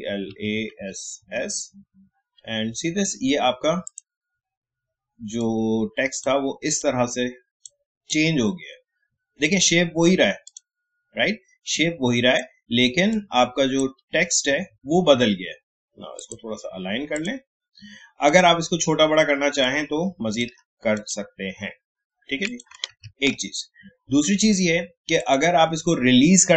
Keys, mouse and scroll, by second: 3.3 typing, 3.8-16.1 drag, 19.6 alt+shift+click, 22.9 ctrl+z, 25.2 click.